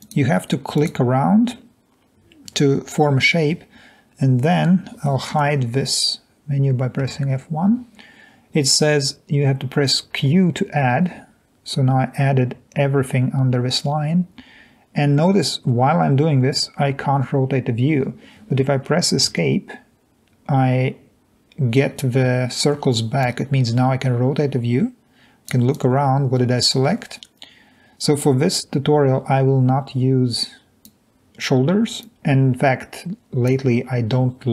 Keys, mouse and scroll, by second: 0.0 click, 7.1 F1, 11.0 q, 19.4 Escape, 24.3-25.1 drag, 25.7 drag, 27.2-28.0 drag, 29.3-30.5 drag.